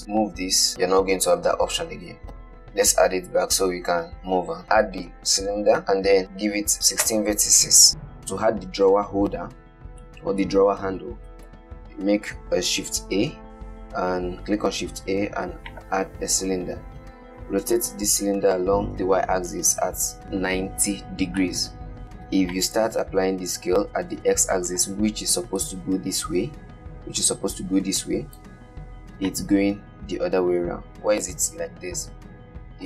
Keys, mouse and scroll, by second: 0.5 g, 2.7 ctrl+z, 2.8 shift+a, 6.7-7.9 drag, 7.9-9.0 middle drag, 10.3-11.7 middle drag, 11.7 shift+a, 16.6-18.0 scroll down 7, 18.0 r, 21.7 middle drag, 22.8-26.2 drag, 27.5 click, 29.6-31.6 drag.